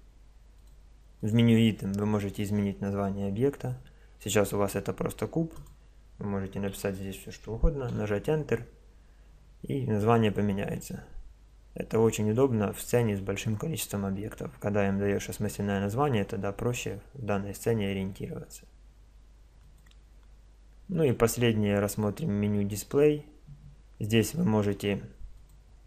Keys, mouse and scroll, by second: 0.5-3.0 drag, 5.5 click, 15.7-17.7 middle drag, 19.6-22.7 drag, 25.3 click.